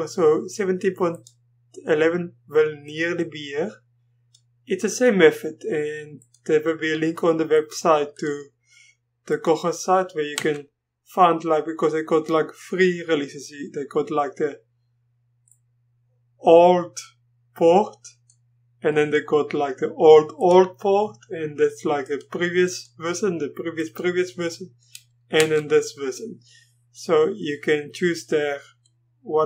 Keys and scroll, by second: 10.3 Return, 25.3 Return.